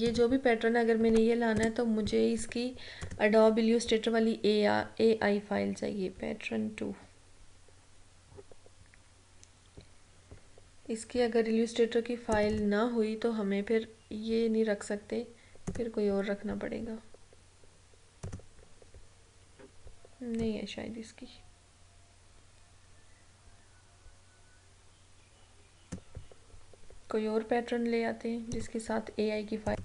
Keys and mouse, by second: 3.1 click, 12.4 click, 15.8 click, 20.4-28.3 drag, 28.6 click.